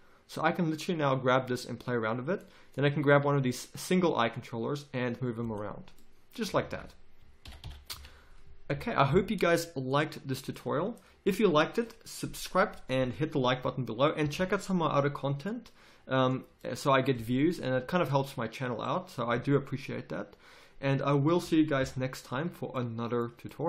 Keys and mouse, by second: 3.2 g, 6.5 a, 6.6 a, 7.5 alt+g, 7.6 alt+r, 7.9 a, 8.7 n, 9.9 click, 11.1 click, 11.3 click, 15.4-18.2 drag, 21.8 KP_5.